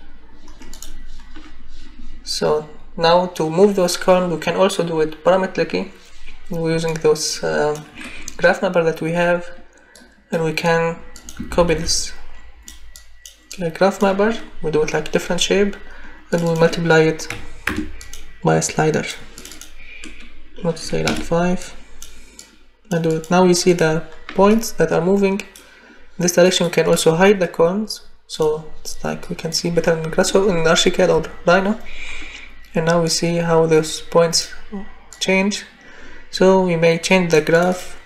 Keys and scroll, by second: 11.5 ctrl+c, 11.7 ctrl+v, 17.3 *, 17.6 Return, 20.8 5, 21.0 Return.